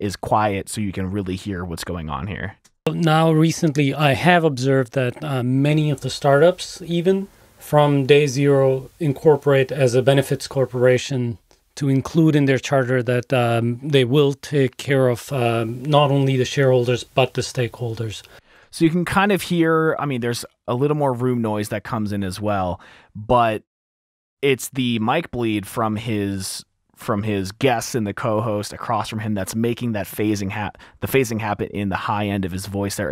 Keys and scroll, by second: 2.9 space, 5.9 s, 11.0 s, 15.3 s, 18.8 space, 32.9 t, 33.0 t.